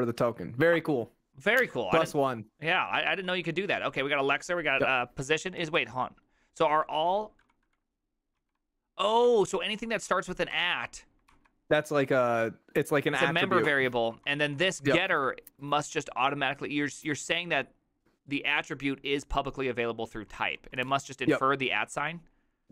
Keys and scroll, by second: 0.2 ctrl+c, 2.5-4.2 typing, 5.6 ctrl+u, 5.6 j, 5.8 ctrl+u, 6.7 ctrl+u, 7.1 ctrl+u, 7.4 ctrl+d, 7.7 ctrl+d, 8.4 ctrl+u, 8.7-15.6 typing, 11.3 ctrl+c, 16.6 typing, 20.3 typing, 22.1-22.7 typing.